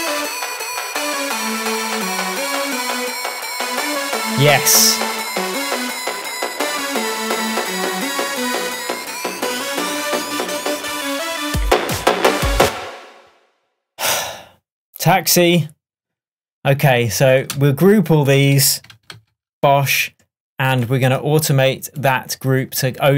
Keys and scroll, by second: 12.7 space.